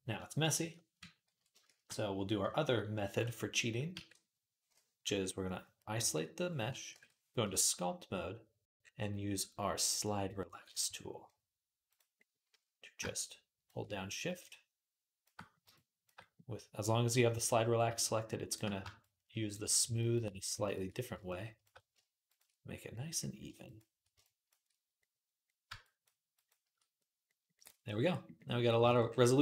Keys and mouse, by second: 1.5 shift+d, 3.8 ctrl+a, 6.7 ctrl+Tab, 8.7-29.4 drag, 8.7 /, 10.6 q, 28.7 ctrl+Tab.